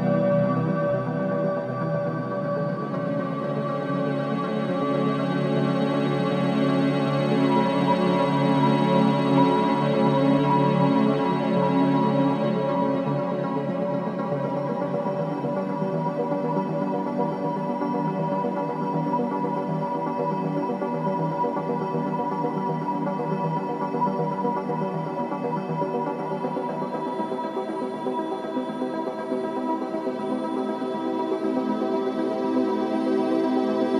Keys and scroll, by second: 19.4 space, 29.1 c, 29.9 3, 30.9 ctrl+c, 31.5 b, 32.0 v, 33.6 v.